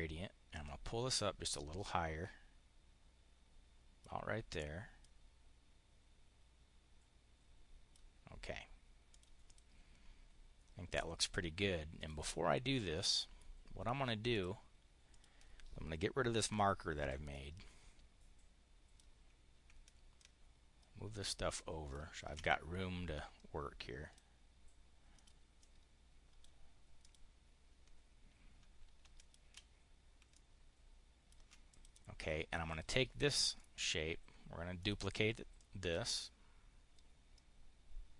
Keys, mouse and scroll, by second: 0.6-4.0 drag, 4.9-7.9 drag, 8.9 click, 9.3 click, 11.1 click, 11.8 click, 12.8 click, 14.1 click, 15.0 click, 16.2 Delete, 16.8 click, 17.1-18.9 drag, 20.0-21.9 ctrl+drag, 22.2 ctrl+click, 22.9-24.1 drag, 25.0 click, 25.5 click, 26.8 click, 29.0 shift+click, 30.2-31.3 ctrl+drag, 31.5 click, 32.5 click, 33.4 click, 34.7 click, 35.4-38.1 drag.